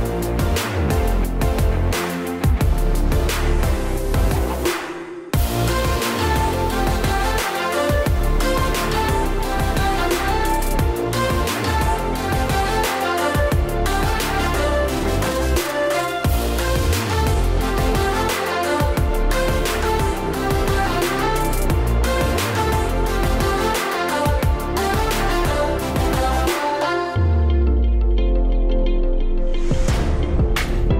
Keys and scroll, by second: 2.1 super+z, 2.8 Right, 3.4 Left, 3.9 Right, 17.8 super+d, 20.4 d, 27.6 Right, 30.5 Right.